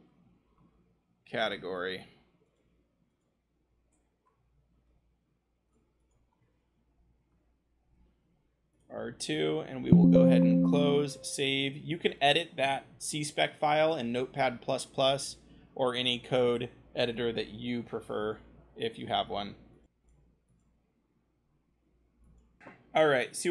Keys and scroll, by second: 0.0-0.5 typing, 4.2 Return, 6.9 BackSpace, 7.8 2, 20.0 ctrl+v, 20.0 a, 22.3 v.